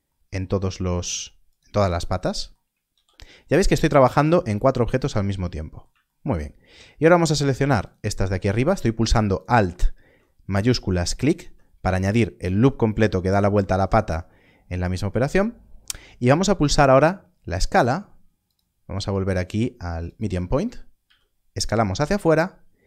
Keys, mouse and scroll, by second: 0.7 ctrl+r, 1.1-1.8 scroll up 1, 1.8 right click, 2.9 ctrl+r, 4.0 right click, 7.0 alt+click, 18.4 click.